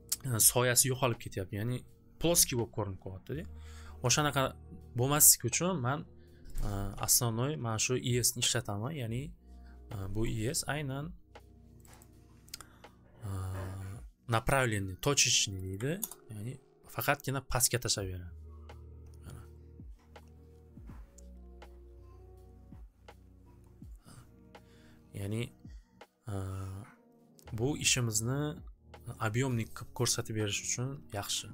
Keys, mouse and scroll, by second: 6.5 click, 7.9-10.9 drag, 11.8 click, 12.0 click, 15.5 click, 15.7 click, 15.7 1, 16.0 Return, 31.2 click.